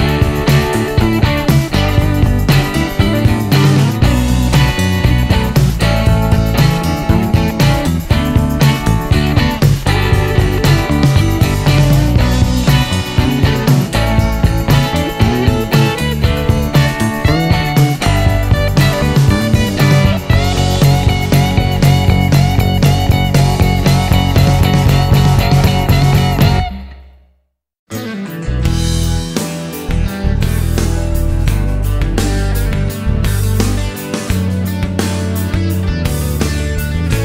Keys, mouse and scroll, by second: 1.9-3.3 drag, 4.8 click, 6.8 click, 7.7 click, 7.9 right click, 8.4 click, 9.2 click, 10.1 shift+r, 11.1 1, 11.6 Return, 13.5-15.5 drag, 17.1 click, 18.9 click, 20.6 click, 21.1 middle click, 23.5 click, 26.1 click, 27.3 shift+r, 33.4 6, 33.8 Return, 34.5-34.9 scroll up 2, 35.1-36.0 scroll up 4, 36.6-37.2 scroll up 4.